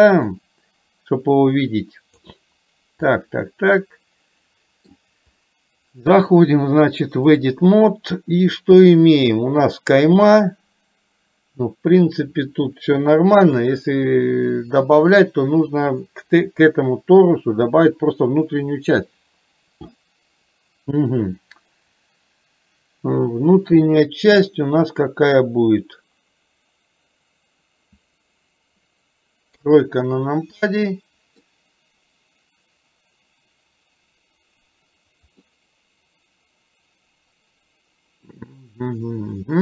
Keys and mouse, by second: 0.5-2.3 drag, 3.2-5.0 middle drag, 6.2-7.5 drag, 29.7 KP_3, 30.7 middle click, 35.5-39.6 middle drag.